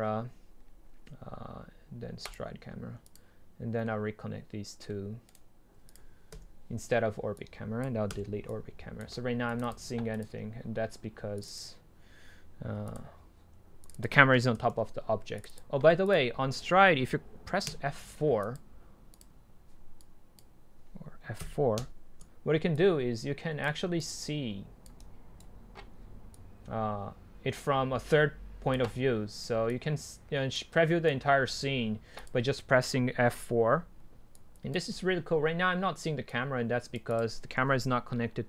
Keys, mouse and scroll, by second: 0.0-2.2 drag, 2.5-3.8 drag, 3.8-4.9 middle drag, 5.3-6.0 right drag, 6.0 drag, 6.3 Delete, 7.4-8.2 drag, 8.2 Delete, 8.5-18.4 drag, 19.2-22.4 drag, 22.9-23.7 drag, 23.7 right click, 24.0-25.0 drag, 25.0 right click, 25.3-26.4 right drag, 26.4 click, 26.6 click, 28.1-28.9 drag, 28.9-29.7 right drag, 29.7 click, 30.1 drag, 30.3 click.